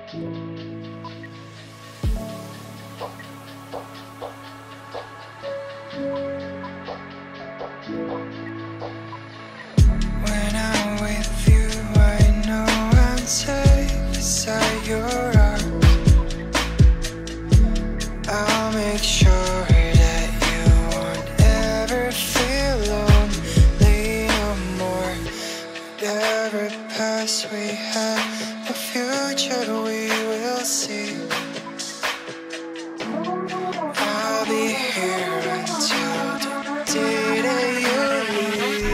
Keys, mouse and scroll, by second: 1.0 ctrl+z, 1.6-2.0 scroll down 1, 3.0 ctrl+g, 3.6-5.1 scroll down 1, 5.4 right click, 6.4 shift+click, 8.2 F2, 9.3 ctrl+k, 14.9 shift+click, 16.4 ctrl+g, 16.4-17.2 scroll down 1, 17.3 double click, 19.8 F2, 21.3 shift+click, 23.9-24.2 scroll down 1, 25.1 shift+F2, 26.5 double click, 29.9 ctrl+k, 31.7 ctrl+z, 32.7-34.3 scroll down 1, 35.9 ctrl+z, 36.7 double click, 37.6 shift+click, 37.9 typing.